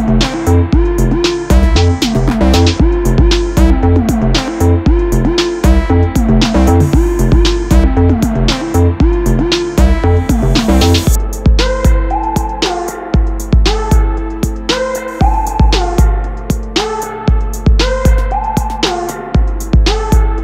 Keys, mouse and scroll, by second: 0.5 click, 0.7 3, 0.8 click, 0.9 shift+click, 1.3 e, 2.4 click, 2.6 e, 3.6 click, 3.8-7.8 middle drag, 4.2 Tab, 4.5 scroll down 2, 7.8 click, 7.9-10.5 middle drag, 8.0-9.0 scroll down 2, 9.0 ctrl+s, 10.5 click, 10.7-11.8 shift+middle drag, 11.2 a, 11.8 click, 12.2 shift+click, 12.3 shift+click, 12.7 ctrl+p, 13.3 click, 13.4 click, 13.5 scroll down 1, 13.6-13.9 scroll up 1, 13.9 middle click, 13.9 g, 14.9 scroll down 1, 15.1 shift+a, 16.4 Escape, 16.6 shift+s, 18.1 Tab, 18.7 KP_Enter, 19.0 middle click, 19.1 scroll down 1, 19.4 Tab, 19.7 click, 19.9 s.